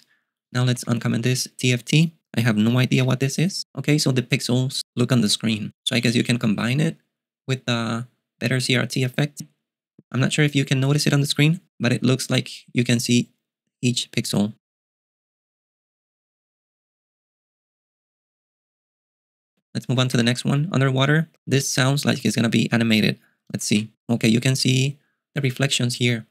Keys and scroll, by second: 0.8 ., 3.2 super+q, 20.2 ., 20.5 j, 22.2 ..